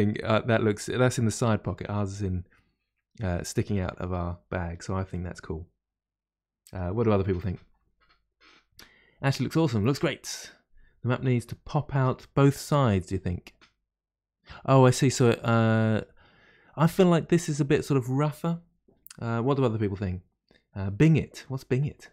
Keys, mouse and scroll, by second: 0.0-4.8 middle drag, 4.0-4.8 scroll down 1, 4.8-5.1 scroll down 1, 5.2-14.6 middle drag, 15.4-18.4 middle drag.